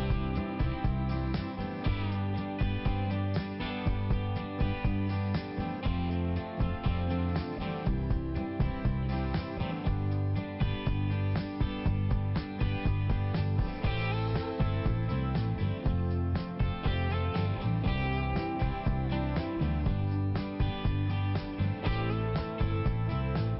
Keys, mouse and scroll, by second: 0.9 click, 1.1 click, 3.8 click, 5.0 click, 5.5 click, 5.9 click, 6.0 double click, 7.0 click, 8.2 click, 8.3 click, 9.4 click, 10.1 1, 10.3 1, 11.1 Return, 12.4 click, 13.5 click, 13.7 click, 14.5 click, 15.9 click, 16.4 click, 17.3 click, 18.8 click, 20.7 Return.